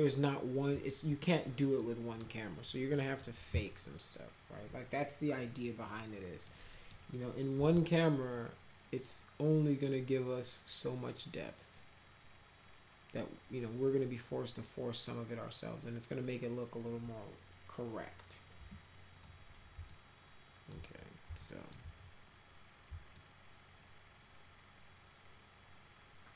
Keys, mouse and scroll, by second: 1.8 middle click, 3.0 middle click, 6.2 middle click, 6.8 middle click, 7.6 c, 18.6 p, 19.2 middle click, 19.9 alt+middle click, 21.4 alt+middle click, 23.2-26.3 alt+middle drag.